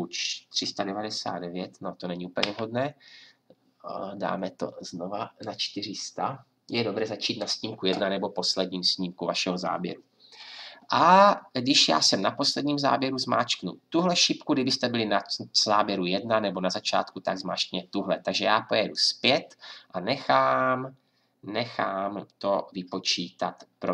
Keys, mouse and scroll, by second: 2.4 Right.